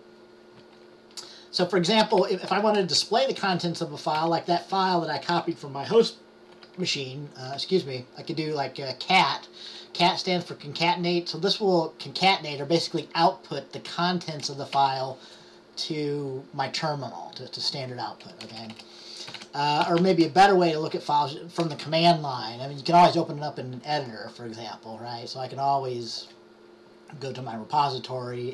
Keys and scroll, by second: 1.9-6.7 typing, 7.7 typing, 21.7 typing.